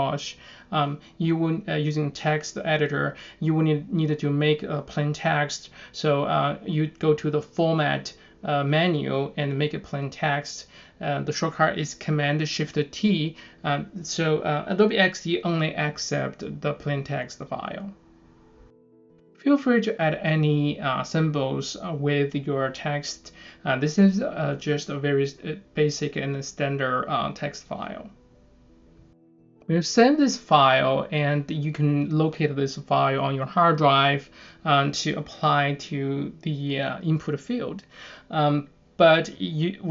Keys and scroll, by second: 2.4 super+s, 7.9-8.7 typing, 11.6 super+Tab, 12.1 super+Tab, 13.9 super+Tab, 14.4 super+Tab, 15.2 super+Tab, 15.7 super+Tab, 18.0 shift+4, 19.3 Down, 19.5 Left, 20.6-27.9 typing, 21.0 Down, 21.1 Left, 21.5 Down, 21.6 Left, 22.0 Down, 22.1 Left, 22.4 Down, 22.6 Left, 23.0 Down, 23.1 Left, 23.5 Down, 23.6 Left, 23.9 Down, 24.0 Left, 24.9 Down, 24.9 Left, 25.5 Down, 25.6 Left, 26.0 Down, 26.1 Left, 26.5 Down, 26.6 Left, 27.0 Down, 27.1 Left, 27.5 Down, 27.6 Left, 28.8 super+s, 36.7 super+n.